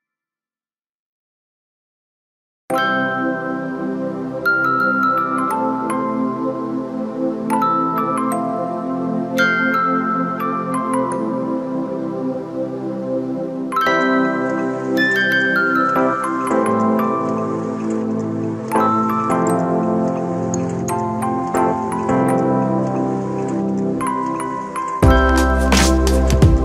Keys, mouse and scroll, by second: 0.6 a, 2.0-3.4 drag, 3.4 BackSpace, 8.1 a, 8.6-9.8 middle drag, 9.8 KP_1, 10.5 shift+middle click, 10.9-11.6 scroll up 2, 12.5 ctrl+t, 17.1-18.3 scroll down 5, 17.5 Tab, 18.3-19.1 scroll up 2, 19.1-19.6 scroll up 1, 19.6-21.5 right drag, 21.5 scroll up 2, 21.8 Tab, 22.6 KP_Divide, 23.2-24.9 middle drag, 24.9 2, 25.4 click, 25.8 click, 26.0 click.